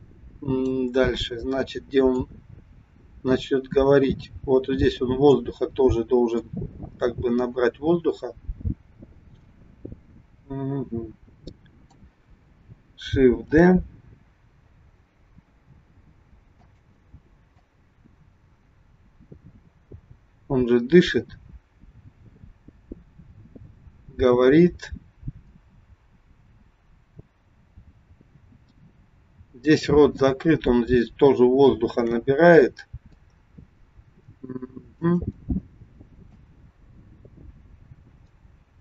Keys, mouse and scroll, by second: 2.2 click, 6.5 click, 13.6 shift+d, 17.7 click, 32.1 shift+d, 36.5 click.